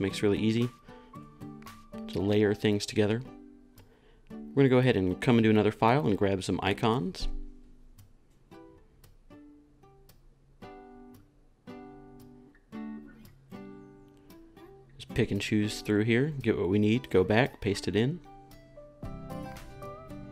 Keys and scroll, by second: 17.1 super+c.